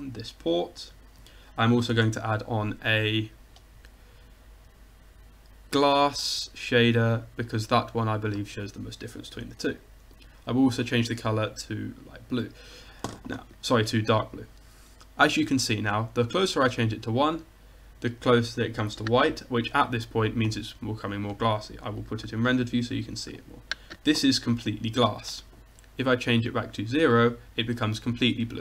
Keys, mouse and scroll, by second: 2.1 shift+a, 6.8-9.4 drag, 10.2-12.2 drag, 16.0-17.8 drag, 26.5-28.6 drag.